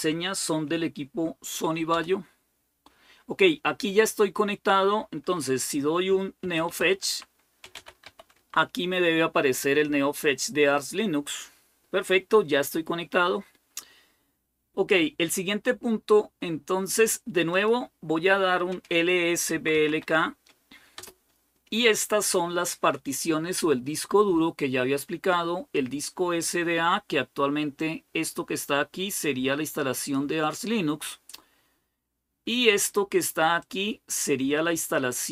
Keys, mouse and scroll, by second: 0.0-1.3 typing, 1.7 Return, 6.0-8.3 typing, 9.2 Return, 15.5-16.7 scroll down 1, 17.3 click, 18.9-20.4 typing, 20.7 Return, 27.6-30.6 drag, 33.4-35.3 drag.